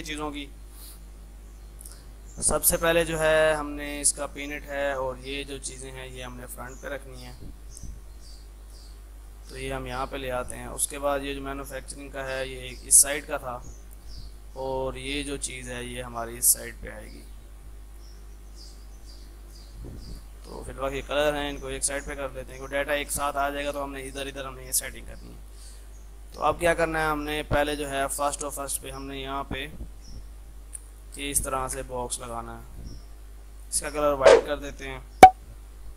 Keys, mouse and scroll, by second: 3.4 F3, 4.0-13.4 drag, 13.5 F3, 14.3-23.2 drag, 23.4 F2, 23.6-26.3 drag, 26.3-31.2 drag, 31.2 space, 31.7 shift+click, 31.9 c, 32.0-33.6 drag.